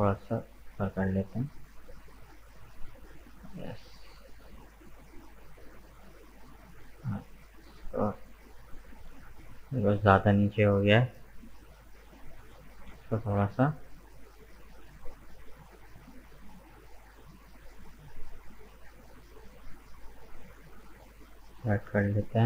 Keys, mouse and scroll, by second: 5.1-7.2 middle drag, 7.2 alt+right click, 7.8 middle click, 8.4 right click, 9.0 right click, 10.0 shift+right click, 10.7 shift+right click, 11.0-13.1 middle drag, 13.1 g, 21.5-22.4 middle drag.